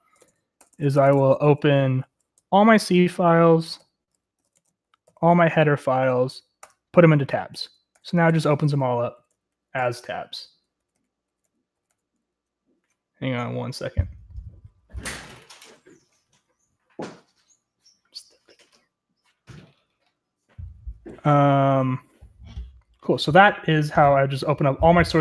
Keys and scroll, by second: 0.0-2.4 typing, 3.5-12.4 typing.